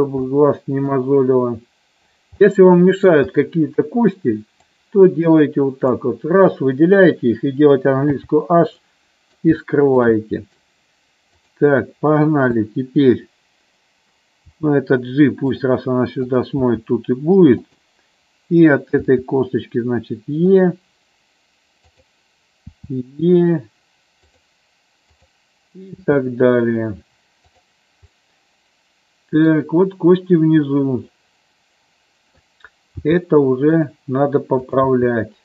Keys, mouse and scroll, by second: 0.4 middle click, 2.7 middle click, 5.0-6.1 drag, 8.2 h, 8.9 middle click, 9.8 shift+middle click, 10.3 middle click, 14.6 g, 15.6 click, 16.4 click, 16.8 g, 19.2 e, 20.7 click, 22.0 click, 22.8 e, 26.2 e, 28.3-29.7 middle drag, 31.3-32.5 middle drag, 33.1 g, 33.9 click, 34.8 click, 35.1 g.